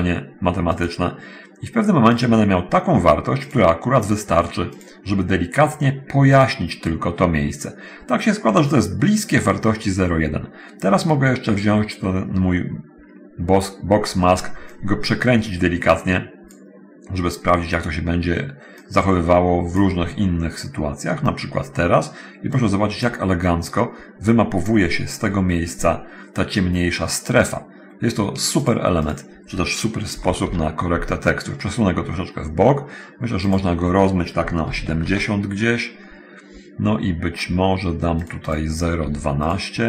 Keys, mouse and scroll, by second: 1.0 click, 2.4 click, 3.6 click, 5.0 click, 6.6 click, 12.0-13.3 middle drag, 14.7-16.9 drag, 19.1 click, 22.7 click, 28.9 click, 29.3 click, 30.3 BackSpace, 30.5 5, 30.7 Return, 33.7 middle click, 34.9 7, 35.0 0, 35.3 Return, 38.5 middle click, 39.7 middle click, 39.7 2.